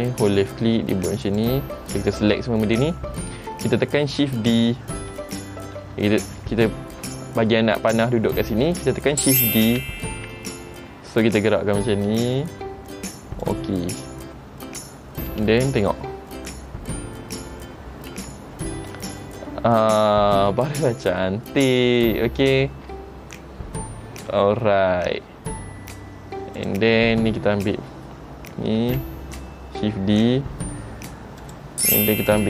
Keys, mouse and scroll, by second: 9.9 shift+d, 15.5 space, 18.4 shift+middle click, 20.8 space, 26.7 click, 29.0 shift+d.